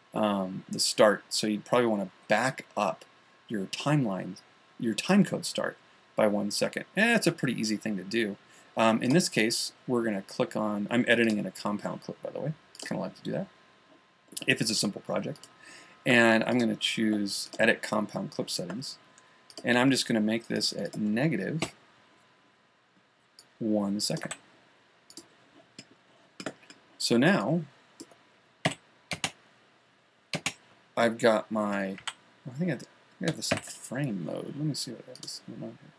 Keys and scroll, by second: 24.7 1, 29.1 Home, 34.0 super+,.